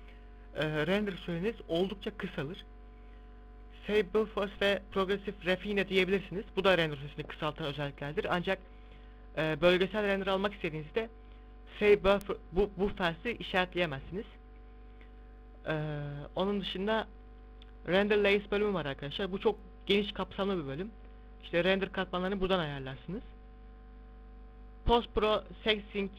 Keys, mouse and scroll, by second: 4.1 click, 4.8 click, 6.3 KP_0, 9.3 shift+b, 13.7 middle click, 14.5 z, 17.0 click, 18.2-18.8 scroll down 4, 19.3-20.9 scroll down 2, 24.1 click.